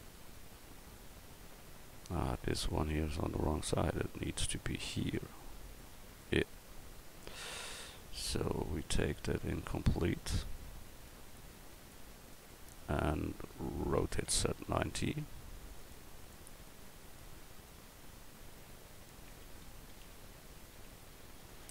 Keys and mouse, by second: 6.9 middle click, 7.5 right click, 9.7 right click, 10.4 middle click, 10.5-12.9 middle drag, 14.0 r, 14.0-15.8 middle drag, 19.8 r.